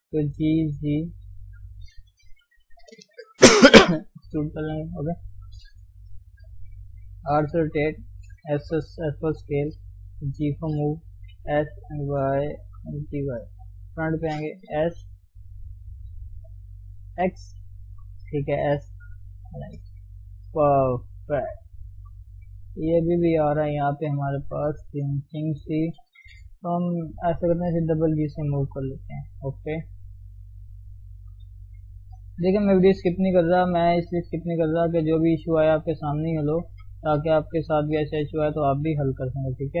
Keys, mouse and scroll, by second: 0.2 g, 2.3 e, 4.7 click, 6.5 r, 7.5 s, 8.8 g, 11.3 s, 12.7 g, 13.7 KP_1, 14.8 s, 17.7 Left, 18.5 s, 19.7 shift+z, 19.8-20.4 scroll down 1, 20.4-21.9 middle drag, 21.9 KP_3, 22.1-22.7 scroll up 1, 22.7 Tab, 24.8 click, 27.3 g, 28.7 click, 28.8 g, 29.9 click, 30.0 g, 31.0 click, 31.3 g, 32.3 click, 32.5 g, 33.3 g, 34.3 click, 34.8 g, 35.8 click, 36.0 click, 36.7 g, 38.2-39.8 middle drag.